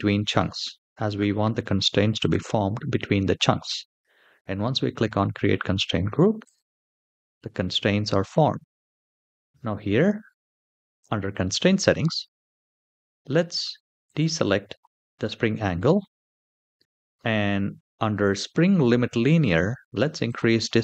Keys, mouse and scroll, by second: 1.9 click, 5.0-6.1 scroll down 2, 6.3 click, 7.0-8.6 middle drag, 9.0-10.4 scroll down 3, 13.8 click, 16.1-17.0 scroll down 1, 17.0-19.0 scroll down 1, 20.0-20.8 drag.